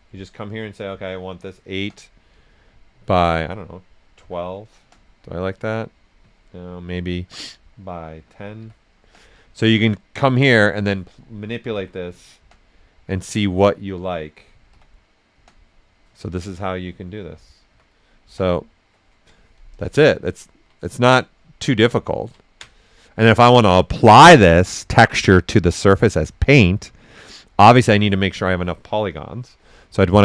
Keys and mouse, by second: 1.3-2.2 typing, 3.0 click, 4.7 Return, 9.0 Return, 10.4 click, 12.1-12.9 typing, 15.3 Return, 18.2 Return, 19.6 right click, 20.2 ctrl+right click, 22.0 ctrl+right click, 22.3 ctrl+right click, 30.0 ctrl+d.